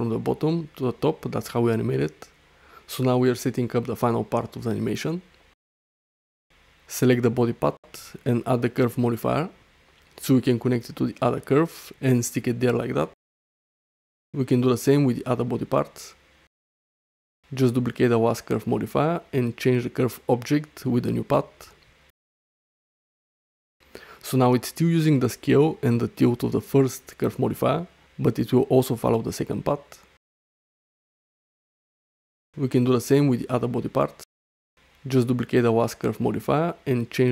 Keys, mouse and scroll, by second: 2.4 alt+middle click, 2.7-3.1 ctrl+alt+middle drag, 3.2 alt+shift+middle drag, 3.6 ctrl+alt+middle drag, 5.7-8.4 drag, 11.4 ctrl+alt+middle drag, 11.8 alt+shift+middle click, 12.1-12.7 alt+middle drag, 14.2 ctrl+z, 15.6 click, 16.8-17.2 drag, 18.6-20.1 drag, 20.9-21.2 drag, 21.7 click, 24.4 shift+middle click, 24.8 middle click, 26.0 middle click, 26.7 shift+middle click, 30.0 click, 31.3 click, 32.4-34.4 drag, 36.3 click.